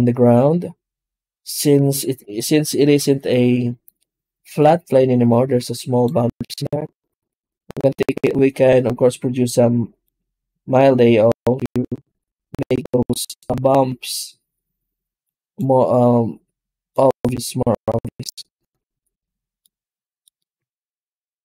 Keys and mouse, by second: 0.3 shift+a, 2.2-3.2 middle drag, 4.7-5.9 drag, 6.2 middle click, 9.3 click, 9.9-11.2 drag, 15.1 click, 16.8 click, 19.5 middle click, 20.5 z.